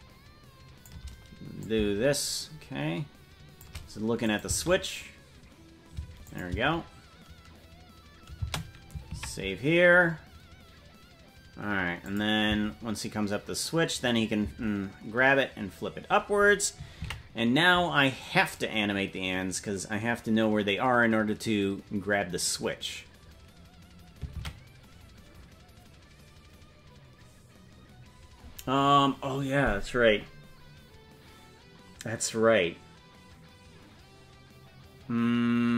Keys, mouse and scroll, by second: 1.6-3.6 shift+drag, 4.2 click, 4.4 space, 6.2 click, 6.2 space, 6.5 space, 11.4 ctrl+s, 12.0 click, 12.4 space, 19.3 ctrl+s, 26.6 ctrl+s.